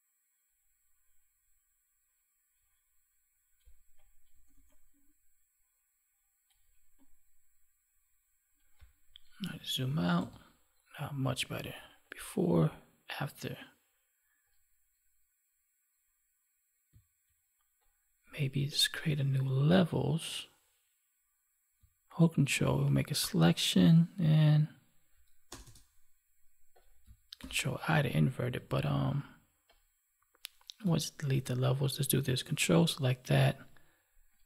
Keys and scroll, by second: 9.3 ctrl+1, 27.2 ctrl+i, 28.3 ctrl+d, 30.7 Delete.